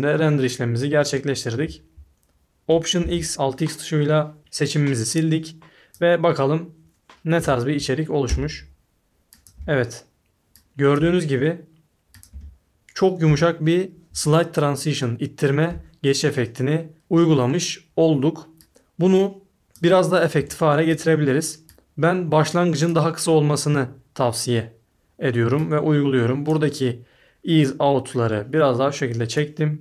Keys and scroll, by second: 3.0 alt+x, 7.4 a, 8.2 space, 9.5 space, 11.0 space, 12.3 space, 13.2 space, 14.1 a, 16.9 s, 20.3 s.